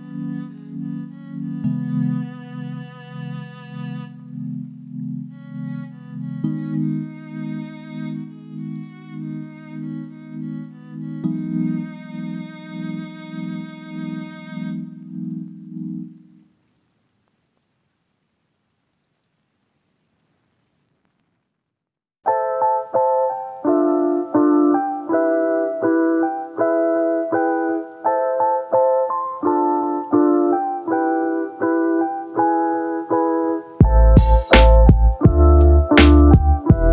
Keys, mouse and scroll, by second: 1.6 middle click, 1.9 Tab, 2.6 2, 3.6 shift+middle click, 3.8 shift+click, 4.4 alt+click, 7.9 ctrl+z, 7.9 ctrl+x, 8.8 ctrl+z, 9.2 ctrl+z, 9.9 1, 10.5 KP_7, 11.3 shift+middle click, 12.9 shift+middle click, 15.2 shift+middle click, 18.1 middle click, 19.5 middle click, 20.1 shift+middle click, 22.4 ctrl+z, 22.5 ctrl+z, 22.9 ctrl+z, 23.4 ctrl+z, 27.1 shift+f, 27.8 ctrl+f, 34.0 click, 34.8 3, 35.0-36.3 drag.